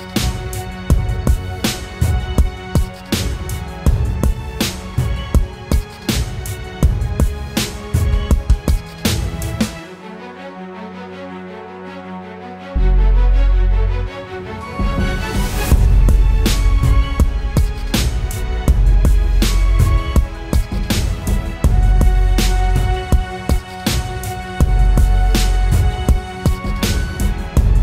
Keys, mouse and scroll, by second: 1.8 Return, 1.9 Return, 25.3-26.4 scroll down 1, 27.0-27.6 scroll up 1, 27.6-27.8 scroll down 1.